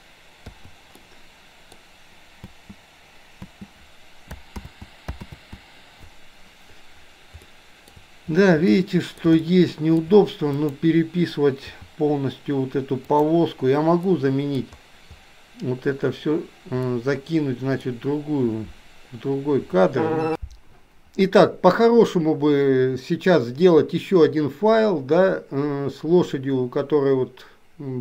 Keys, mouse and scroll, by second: 0.6 i, 1.1 middle click, 2.5 space, 4.2 ctrl+space, 4.7 ctrl+z, 5.9 ctrl+z, 7.5-8.0 shift+middle drag, 8.7-9.3 middle drag, 9.5-10.1 shift+middle drag, 10.6 click, 11.8 g, 14.1 middle click, 17.0 middle click.